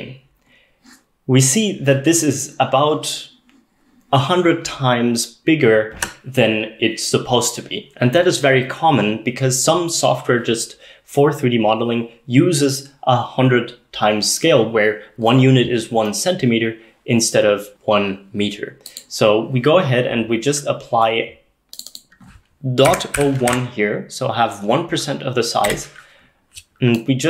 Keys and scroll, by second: 22.9-24.0 typing, 25.7 Return.